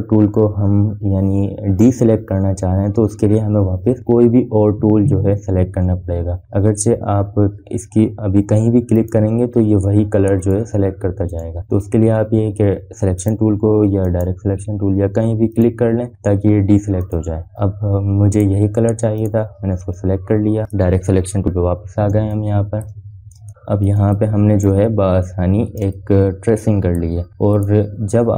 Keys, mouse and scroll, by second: 10.7 click, 12.4 click, 22.5 click, 24.0 space, 24.2 click, 24.4 scroll down 1, 24.6 space, 24.8 click, 25.2 scroll up 1, 25.9 space, 26.1 click, 26.3 space, 27.9 click, 28.2 space.